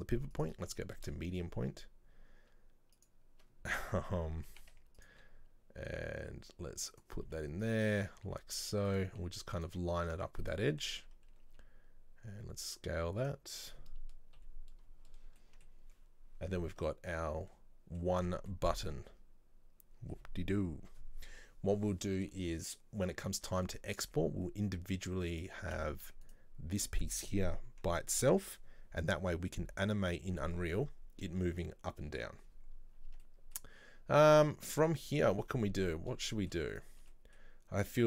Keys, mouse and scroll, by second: 0.9 shift+middle click, 1.2-1.7 scroll up 2, 1.7 s, 10.5 middle click, 10.9-11.6 scroll down 1, 11.6 s, 14.5 KP_3, 15.1-15.5 scroll up 1, 15.5 middle click, 15.8-16.1 scroll down 1, 16.4-16.8 scroll down 1, 16.8 Tab, 16.9-18.3 middle drag, 18.3-18.6 scroll up 2, 18.6-19.9 middle drag, 19.9-20.2 scroll down 2, 25.4 right click, 25.9 scroll up 1, 26.1 Tab, 26.3 right click, 32.6 scroll down 1, 33.2 Tab, 33.3-34.2 middle drag, 34.2-34.5 scroll up 2, 34.5-36.1 middle drag, 36.1 scroll down 1, 36.4 shift+middle click, 36.8 right click, 37.1 Tab, 37.2-38.0 middle drag.